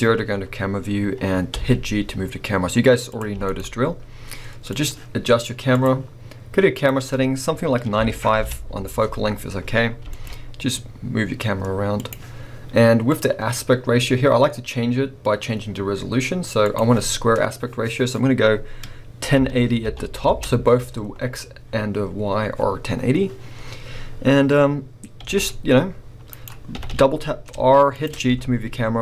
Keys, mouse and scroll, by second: 1.5 g, 3.2 click, 3.3 g, 4.8 click, 5.7 click, 6.8-8.5 drag, 8.5 Return, 10.0 g, 10.5-12.1 drag, 13.1 click, 16.6-26.4 drag, 20.3 Return, 23.5-24.6 scroll, 24.6-25.4 scroll down 2, 25.4 r, 26.4 right click, 26.7 r, 28.2 g.